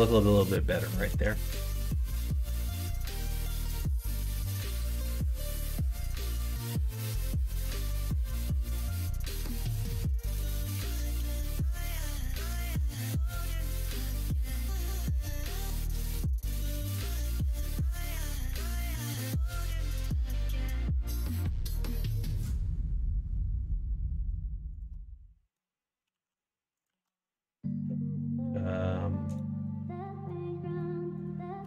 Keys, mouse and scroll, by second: 0.5 middle click, 0.9 shift+middle click, 1.4 click, 1.8 Tab, 2.3 middle click, 3.5 middle click, 4.8 middle click, 6.5 middle click, 7.8 /, 9.1 middle click, 9.5 middle click, 9.8 3, 11.2 middle click, 12.1 1, 13.1 h, 13.4 middle click, 14.2 middle click, 15.1 alt+click, 15.8 middle click, 16.3 1, 16.8 shift+click, 17.5 click, 18.7 middle click, 19.9 middle click, 22.5 middle click, 23.5 alt+click, 23.8 middle click, 24.9 middle click, 26.0 s, 26.9 ctrl+z, 27.6 ., 30.0 2, 30.6 shift+click, 31.2 shift+click.